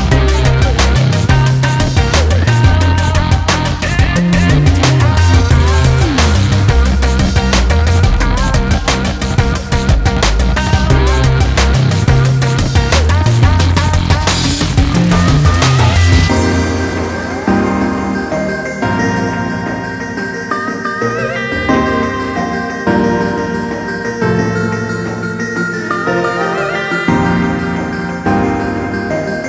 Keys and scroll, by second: 0.1 ], 0.5 ], 12.0 ▮.